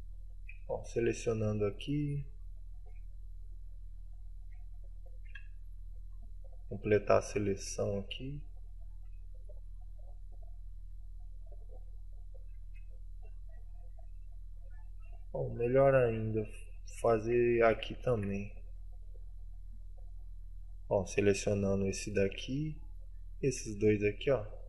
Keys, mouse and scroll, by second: 0.1 right click, 0.9 shift+right click, 1.3 shift+right click, 1.6 w, 2.5 shift+middle click, 3.4-4.0 scroll down 2, 4.4 right click, 5.1 shift+right click, 5.5 w, 6.8 right click, 7.5 shift+right click, 8.2 KP_Decimal, 8.6 middle click, 9.1 w, 10.2 middle click, 12.1 right click, 12.8 KP_Decimal, 13.4-15.2 scroll down 20, 15.2 middle click, 15.7-16.1 scroll down 1, 16.1 middle click, 17.6 KP_Decimal, 18.2 shift+f, 18.5 click, 18.7-21.9 scroll down 22, 21.9 right click, 23.0 shift+right click, 23.6 right click, 23.8 w.